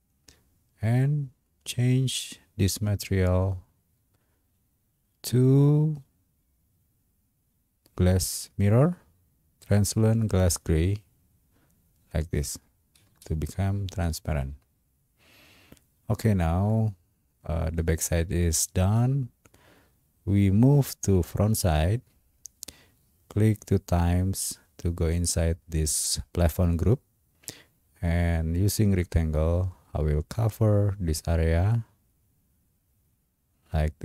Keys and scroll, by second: 13.1 space.